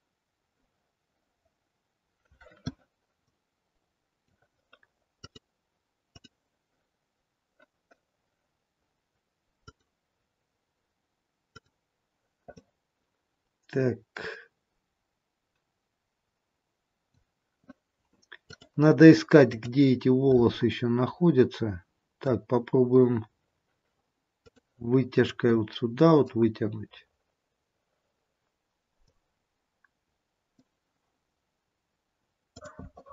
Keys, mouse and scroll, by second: 3.3 middle click, 5.3 click, 9.8 click, 11.7 click, 12.7 middle click, 18.4 click, 21.0 middle click, 23.0-23.7 scroll down 1, 24.3 click, 25.5 click, 29.1 click, 32.5 click.